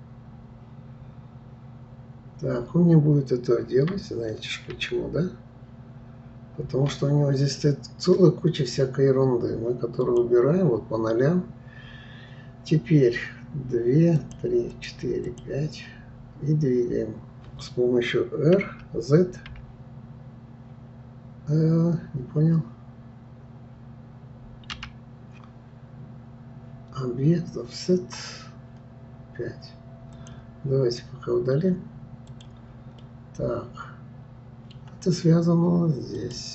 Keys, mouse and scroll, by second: 4.7 ctrl+z, 10.0-10.7 drag, 14.2-16.1 drag, 30.1-30.5 drag, 32.3 click, 33.0-36.0 middle drag, 36.2 click.